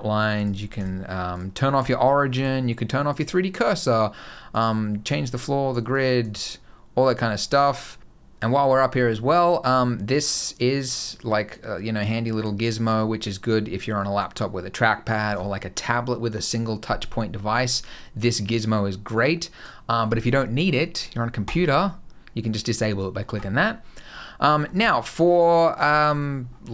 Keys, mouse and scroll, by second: 9.9 click, 11.3 click, 12.7 click, 18.2 click, 24.0 middle click, 24.4 scroll down 2, 24.6 middle click, 25.2 scroll up 1, 25.3 middle click, 25.8 shift+middle click, 26.0-26.7 scroll up 2.